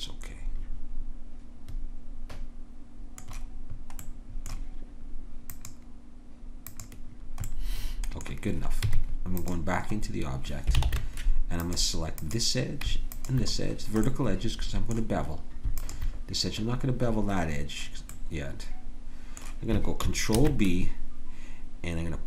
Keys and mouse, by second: 4.0-5.4 middle drag, 5.4-9.5 drag, 8.8 Tab, 10.8 ctrl+Tab, 12.2 click, 20.4 ctrl+b.